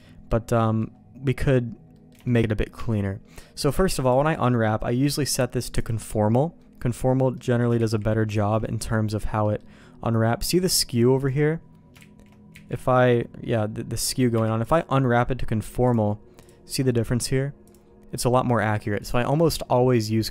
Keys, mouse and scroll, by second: 0.2 middle click, 0.6 middle click, 1.9 middle click, 2.2 shift+middle click, 2.4 middle click, 2.8 Tab, 3.7 u, 5.8 click, 6.6 middle click, 7.3 middle click, 7.8 ctrl+z, 8.3 ctrl+shift+z, 8.6 middle click, 9.4 middle click, 10.7 middle click, 12.0 ctrl+shift+z, 12.5 ctrl+z, 14.3 u, 15.8 click, 17.7-19.1 drag, 20.1 middle click.